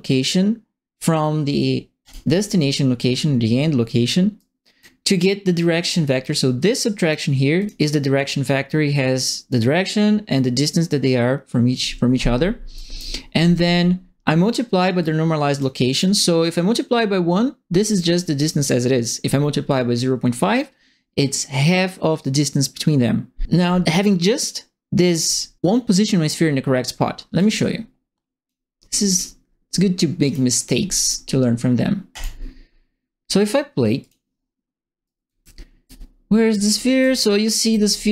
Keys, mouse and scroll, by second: 2.0 click, 4.3 right click, 5.8 click, 6.6 click, 7.5 click, 8.1 click, 12.7 right click, 15.0 click, 15.9 click, 17.8 click, 19.6 click, 27.3-28.4 drag, 29.0 click, 30.2 click, 32.1 click, 34.0 click, 35.0-37.9 typing, 35.0-38.1 right drag.